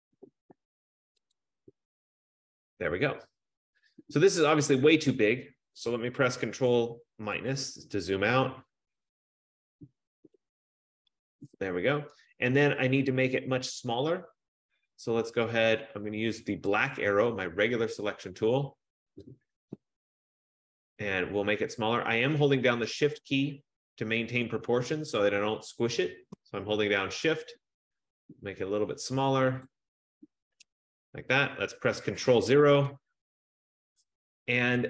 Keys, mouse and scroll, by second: 1.5 click, 6.7 click, 7.6 ctrl+-, 8.2 ctrl+-, 9.1 ctrl+-, 10.2 ctrl+-, 10.8 ctrl+-, 10.9 ctrl+-, 17.0 click, 29.9 shift+click, 32.5 ctrl+0.